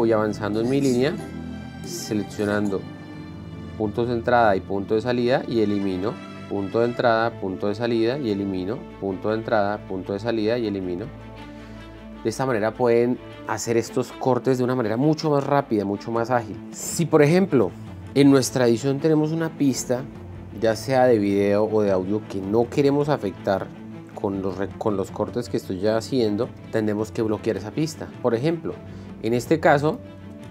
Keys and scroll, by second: 0.6 l, 1.9 k, 2.9-3.9 typing, 5.7-10.9 typing, 8.4 End.